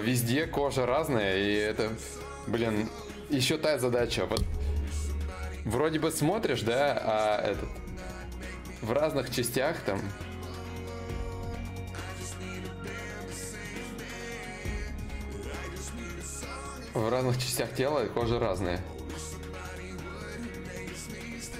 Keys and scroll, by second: 19.1 alt+Tab.